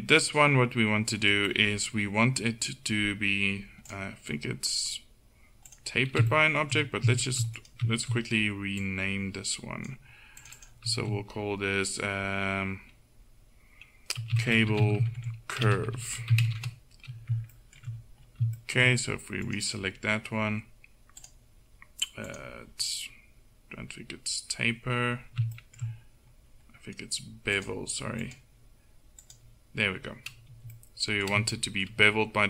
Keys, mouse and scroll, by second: 0.2-2.3 drag, 3.9-6.0 drag, 6.0-7.6 middle drag, 7.6-16.6 drag, 8.9-16.6 right drag, 17.6-19.5 middle drag, 19.5-23.1 drag, 20.2-22.5 middle drag, 21.3-22.5 right drag, 25.6 middle click, 27.6-30.1 drag, 30.5 z.